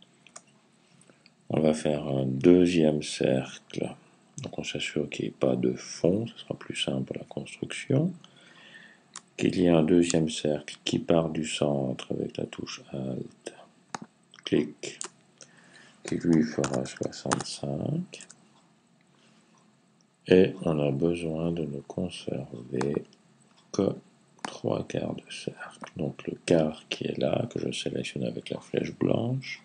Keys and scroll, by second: 15.9-17.4 typing.